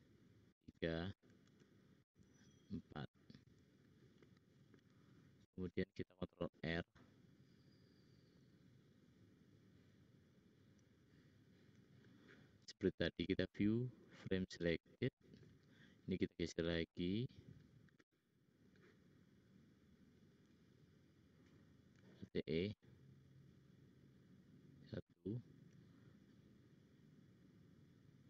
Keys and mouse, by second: 1.4 alt+e, 5.8 ctrl+r, 13.3-15.4 middle drag, 19.6 click, 20.3 click, 22.0 alt+e, 25.5 alt+e.